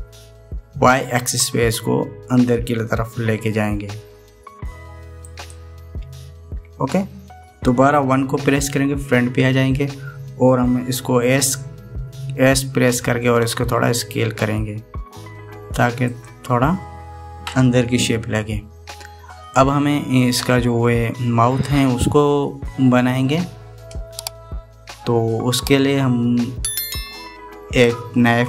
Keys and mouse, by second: 9.2 KP_1, 14.2 s.